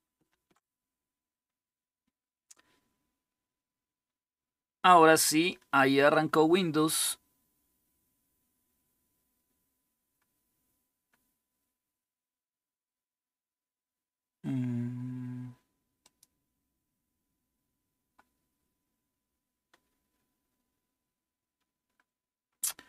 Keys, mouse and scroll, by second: 15.8-16.8 drag.